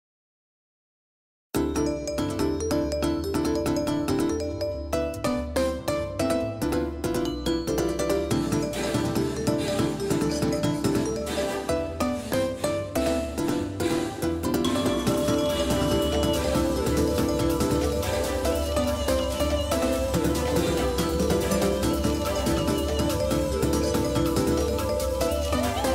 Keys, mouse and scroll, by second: 2.3 ctrl+z, 3.6-5.8 right drag, 5.3-7.9 drag, 6.2 ctrl+z, 7.9 middle click, 13.2 click, 22.2 shift+a.